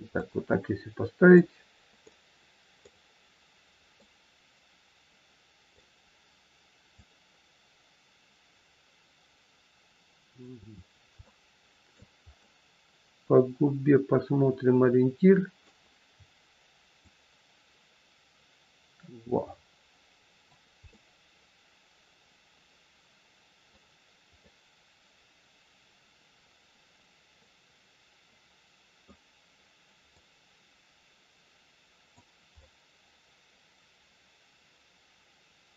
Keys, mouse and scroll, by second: 0.2 middle click, 2.1 middle click, 6.9 middle click, 6.9 click, 10.7-11.1 scroll down 2, 11.2 shift+middle click, 12.3 middle click, 16.9 click, 20.9 middle click, 24.4 middle click, 30.0 click, 32.6 middle click.